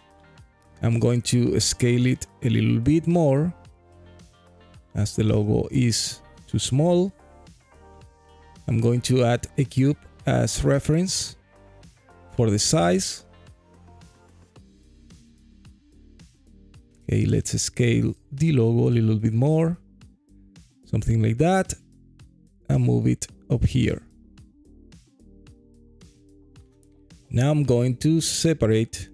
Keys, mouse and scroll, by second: 0.3-0.6 scroll up 1, 0.8 alt+middle click, 1.4-1.8 scroll down 4, 2.0 alt+middle click, 3.8 s, 5.6 click, 6.3 s, 7.3 click, 7.7-8.3 scroll down 3, 8.3 alt+middle drag, 9.6 shift+a, 12.1-12.6 scroll down 4, 15.0 Delete, 16.2 click, 17.1 s, 19.2 click, 19.9 g, 20.3 z, 22.0 click, 24.3-24.9 alt+drag, 25.1-25.8 alt+middle drag, 26.0-26.4 scroll up 2, 26.6-27.1 alt+middle drag, 27.1 alt+click, 27.7 click, 28.3 alt+click.